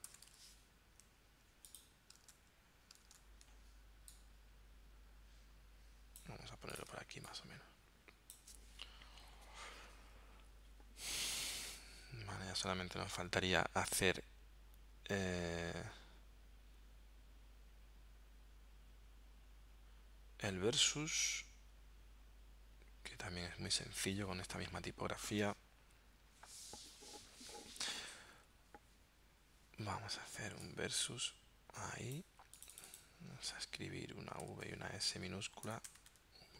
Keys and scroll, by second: 0.0-0.3 typing, 2.4 super+Tab, 3.2 super+Tab, 6.9 space, 34.5 v, 34.7 s, 35.7 BackSpace, 36.1 s.